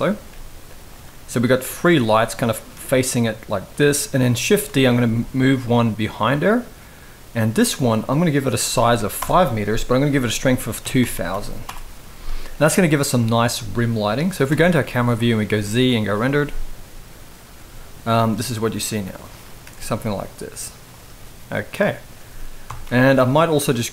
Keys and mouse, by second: 0.0 g, 1.5 click, 1.7 g, 2.4 r, 4.2 shift+d, 5.2 r, 8.2 click, 9.8-11.4 drag, 10.8 0, 11.0 0, 12.4 g, 14.2 KP_0, 15.2 z, 17.8 g, 19.3 r, 22.4 KP_7.